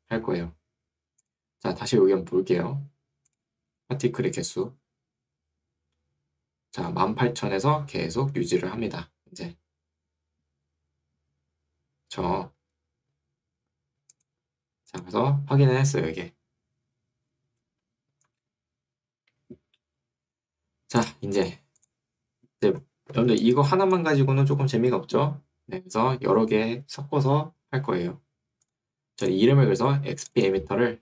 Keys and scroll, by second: 26.1 Escape.